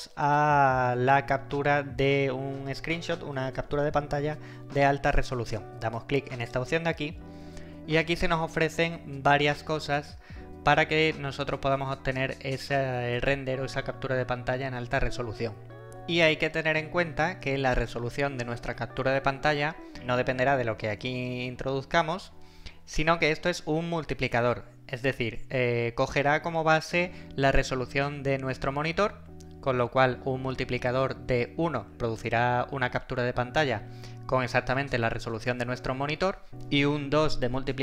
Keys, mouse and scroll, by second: 6.4 click.